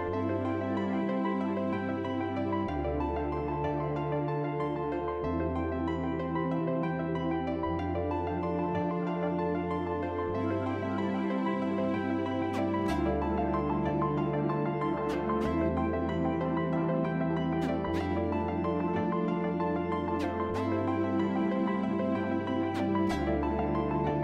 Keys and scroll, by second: 0.0-1.4 typing, 3.3 e, 4.2 f, 5.1 q, 11.0 c, 13.4 f.